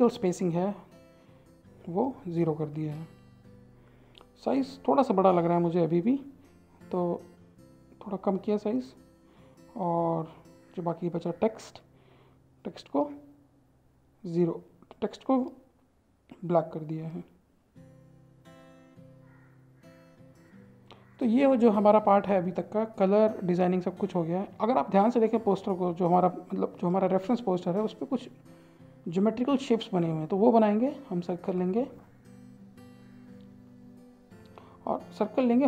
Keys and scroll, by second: 7.1 ctrl+a, 16.9 ctrl+a, 30.5 ctrl+z.